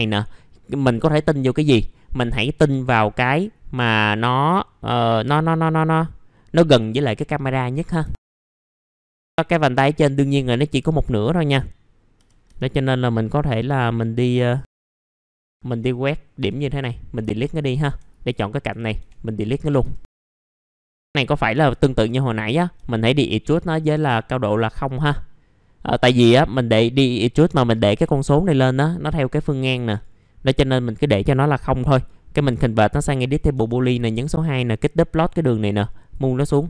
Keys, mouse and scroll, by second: 8.1 alt+middle click, 8.5 alt+middle click, 9.2-9.5 scroll down 1, 9.5-9.9 scroll up 1, 10.8 alt+middle click, 13.1 scroll up 1, 13.6 middle click, 14.6-15.0 scroll up 1, 15.0 click, 16.4 Delete, 17.3 alt+middle click, 18.1 click, 19.0 Delete, 19.3 middle click, 20.3-20.6 scroll down 1, 20.7-21.5 scroll up 1, 21.5 click, 22.1 alt+middle click, 24.8-26.6 drag, 28.1 alt+middle click, 29.8 right click, 33.2 click.